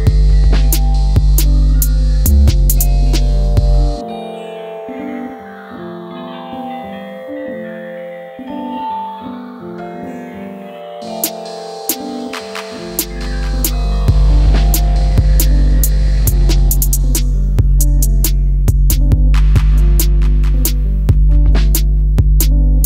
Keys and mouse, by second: 0.1 middle click, 1.2 KP_1, 4.5 alt+click, 5.3 alt+click, 8.4 s, 8.6 x, 9.6 right click, 10.5 middle click, 11.5-14.5 middle drag, 14.9 ctrl+z, 15.1 ctrl+z, 16.0 ctrl+z, 16.7 s, 19.7 KP_1, 22.3-22.8 drag.